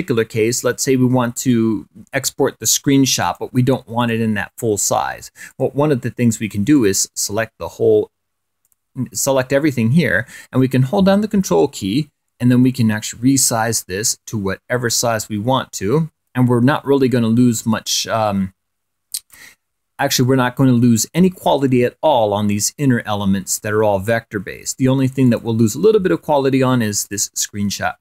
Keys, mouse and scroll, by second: 4.3 click, 5.2 click, 6.5 click, 7.8-10.0 drag, 13.9-20.6 ctrl+drag, 21.3-22.6 drag, 26.3 click.